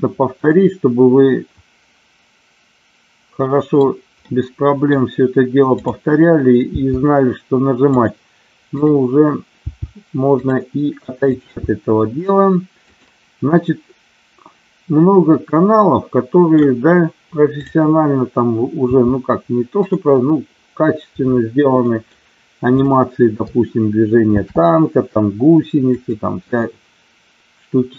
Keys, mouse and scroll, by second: 0.2-3.6 middle drag, 4.2 middle click, 6.7 g, 7.9 click, 8.7 click, 9.7 g, 10.3 click, 11.3 click, 11.7 g, 12.9 click, 13.5-16.6 middle drag, 18.9 g, 19.8 click, 21.8 middle click, 22.7 click, 24.3 shift+d, 25.8 click, 26.7-27.9 middle drag.